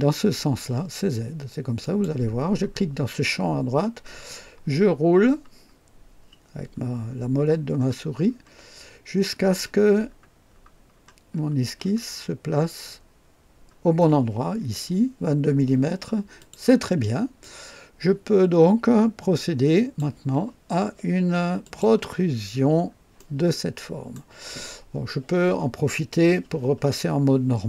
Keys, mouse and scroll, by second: 1.8 click, 4.7 scroll up 1, 5.5 scroll up 1, 7.7-8.6 scroll up 4, 9.6-13.3 scroll up 9, 16.4 click, 17.4-20.2 drag, 21.6 click, 22.4-22.9 scroll up 2, 23.1-24.3 right drag.